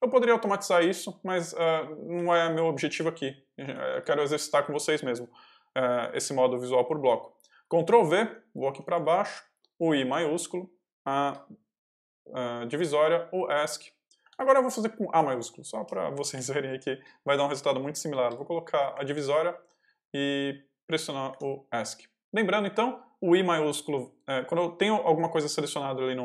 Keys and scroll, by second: 0.7 l, 2.0 h, 3.8 ctrl+v, 7.8 j, 9.5 shift+j, 11.0 shift+\, 12.6 Escape, 13.1 l, 14.1 ctrl+l, 14.2 ctrl+v, 14.4 ctrl+j, 15.0 ctrl+j, 15.7 shift+j, 16.2 shift+a, 18.8 shift+\, 19.9 shift+\, 21.2 Escape.